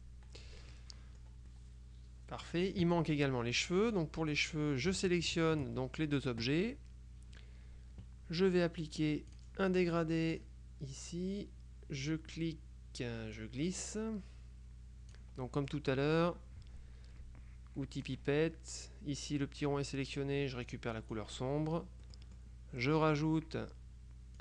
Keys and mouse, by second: 0.8 click, 3.9 click, 5.4 shift+click, 9.4 click, 10.5 click, 13.5-15.7 drag, 15.5 right click, 18.1 click, 20.7 click, 22.1 middle click, 23.0 middle click.